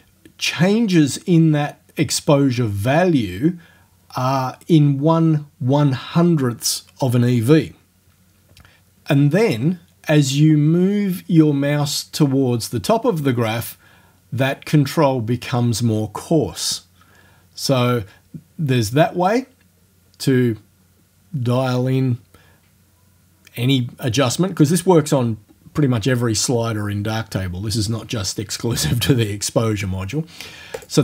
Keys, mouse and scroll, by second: 30.8 click.